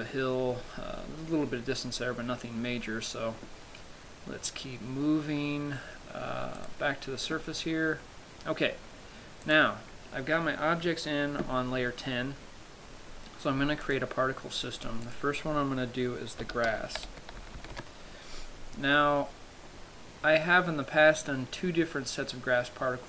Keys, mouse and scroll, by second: 0.5-2.1 scroll up 1, 2.1 scroll up 1, 6.9 right click, 9.8 click, 14.1 click, 15.3 click.